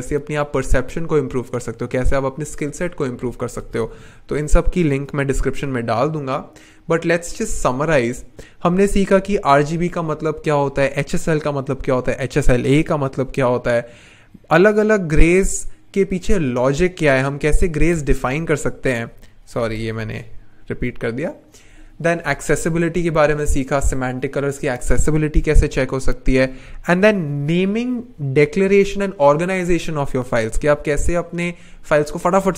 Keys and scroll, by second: 5.4 n, 19.4 shift+Return, 19.8 BackSpace.